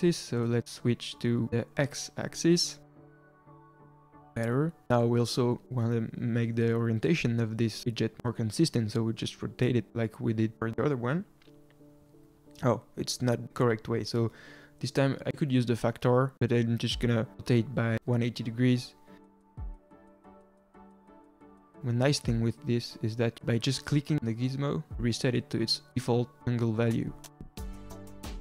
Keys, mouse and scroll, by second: 0.7-1.7 scroll down 2, 1.7-3.8 drag, 8.7-9.5 middle drag, 9.5 r, 11.8-12.1 middle drag, 12.1 click, 15.3 scroll down 1, 15.5-16.8 middle drag, 16.8 r, 18.8 ctrl+z, 20.1 r, 22.7-24.1 middle drag, 24.1-25.8 drag, 27.0-28.4 drag.